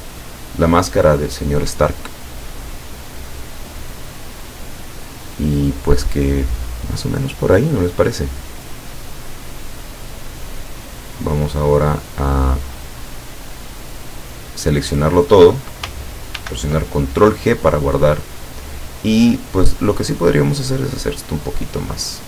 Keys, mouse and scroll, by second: 0.1 ctrl+scroll down 2, 8.9 click, 13.1-14.3 drag, 16.4 ctrl+g, 18.8-22.2 drag.